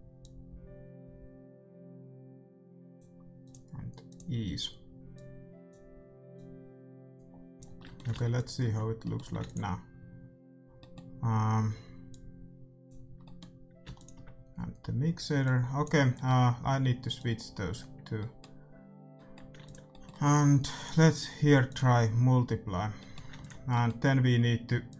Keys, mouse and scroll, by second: 5.7-8.1 drag, 7.7-12.6 middle drag, 8.3-10.2 drag, 9.3 ctrl+s, 12.0-18.9 drag, 13.2-15.4 middle drag, 16.1-21.7 middle drag, 19.5 ctrl+s, 20.7-22.5 drag, 23.0-24.9 middle drag, 23.3 ctrl+s, 24.8-24.9 drag.